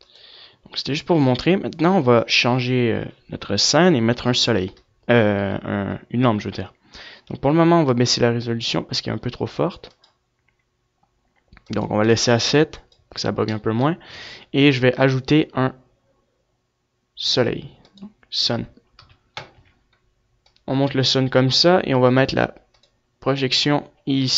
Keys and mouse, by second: 4.0 F11, 10.2-12.2 right drag, 12.2 middle click, 12.8 shift+a, 17.9 KP_3, 18.5 z, 19.3 click, 20.6 click, 20.6 r, 21.9-24.3 drag.